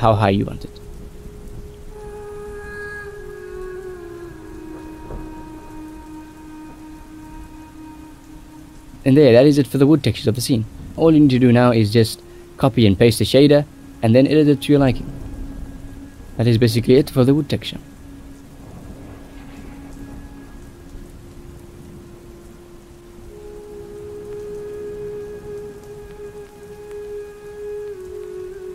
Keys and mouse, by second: 1.6 shift+a, 4.8 click, 6.0 click, 7.4 shift+middle drag, 8.0-9.8 drag, 10.5 click, 12.0 click, 13.1 shift+middle click, 13.7 ctrl+s, 13.9 shift+middle click, 14.9 shift+middle click, 17.0 middle click, 17.7 middle click, 19.8 shift+middle click, 20.7 ctrl+s, 20.9 shift+middle click, 22.5 shift+middle click, 23.7 shift+middle click, 24.5 click, 25.8 middle click, 25.9 a, 26.1 x, 26.5 ctrl+v, 27.1 shift+middle click, 28.1 middle click, 28.4 middle click.